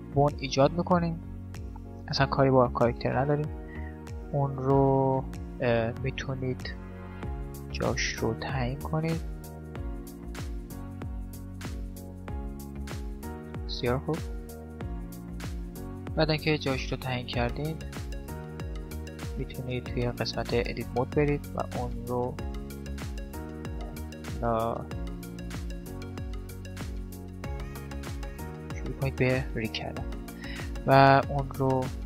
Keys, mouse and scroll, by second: 4.1-6.9 right drag, 7.2 right click, 12.8-14.0 middle drag, 14.0 click, 14.0-15.7 right drag, 15.4 click, 15.7 middle click, 16.5 middle click, 17.3 right click, 19.2 Tab, 21.4 right click, 24.1 right click, 26.4-28.3 right drag, 29.9-31.8 middle drag, 30.9 click, 30.9 right click.